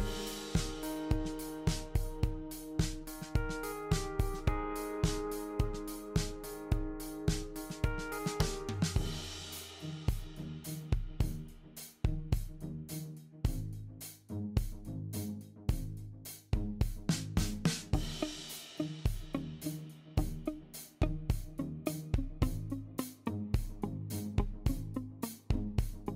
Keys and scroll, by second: 3.3 typing, 5.7-6.9 typing, 8.0-10.4 typing.